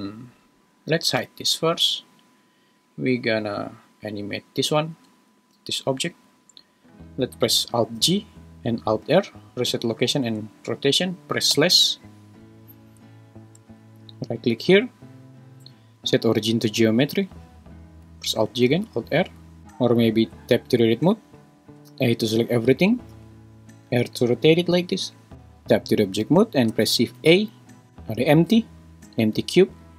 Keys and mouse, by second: 1.2 h, 2.2 middle click, 5.4 g, 6.1 Escape, 8.0 alt+g, 9.0 alt+r, 10.2 `, 11.5 /, 14.6-16.9 right drag, 18.3 alt+g, 18.7 alt+r, 19.6 Tab, 19.6 a, 20.3 Tab, 21.9 a, 23.1 r, 25.3 Tab, 26.8 shift+a.